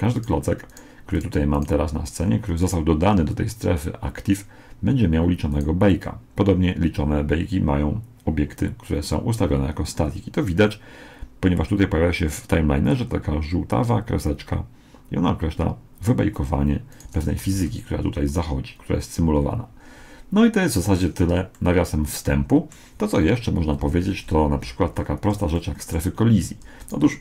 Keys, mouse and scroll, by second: 5.5 right click, 16.9 right click, 17.6 alt+a, 21.0 Escape, 21.6-23.4 middle drag, 23.8 KP_1, 25.6-27.2 middle drag, 26.8-27.2 right drag.